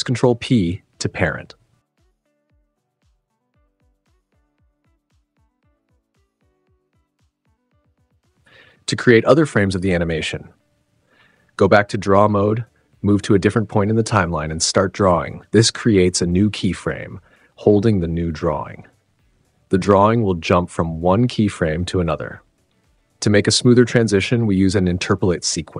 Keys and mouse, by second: 0.7 ctrl+p, 2.1 click, 2.9 shift+click, 5.6 click, 6.2 ctrl+p, 6.8 Tab, 8.1 space, 8.9 super+s, 10.0 space, 11.1 click, 12.9 super+z, 13.0-14.0 drag, 13.1 0, 14.6 click, 15.2 super+z, 15.4 click, 16.2-17.3 drag, 17.9 click, 18.5 click, 19.6 space, 21.2 space, 21.6 click, 21.7 click, 22.2 super+z, 23.1 click, 23.9 shift+click, 24.7 click, 25.1 g.